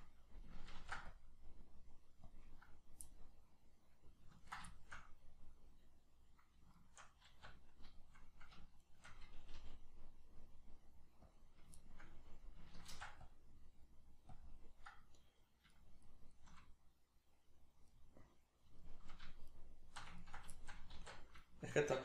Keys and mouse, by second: 0.8 ctrl+r, 2.3 click, 2.6 right click, 3.1-4.4 middle drag, 4.4 ctrl+right click, 4.7-6.7 shift+middle drag, 6.7 shift+right click, 7.3 alt+q, 7.9 shift+middle click, 8.9 shift+right click, 9.5 g, 11.4 click, 11.8-14.4 shift+middle drag, 12.9 ctrl+r, 14.4 click, 15.2 right click, 15.7 shift+right click, 16.1 shift+right click, 16.3 shift+right click, 17.9-19.5 middle drag, 19.5 shift+right click, 20.2 ctrl+right click, 20.5-22.0 shift+middle drag, 21.0 alt+q.